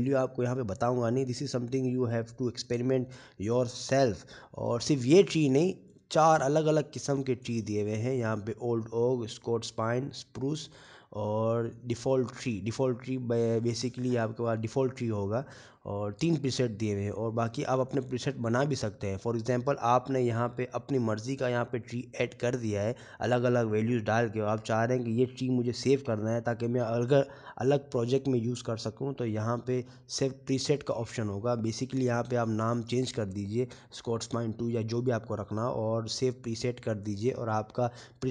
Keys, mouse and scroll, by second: 1.1 scroll down 2, 3.5-3.9 scroll up 8, 4.9 shift+middle click, 6.5-7.8 scroll down 9, 9.6 click, 21.7-22.4 scroll up 6, 25.9 shift+middle click, 27.1 scroll down 4, 27.8 scroll down 2, 28.4 shift+middle click.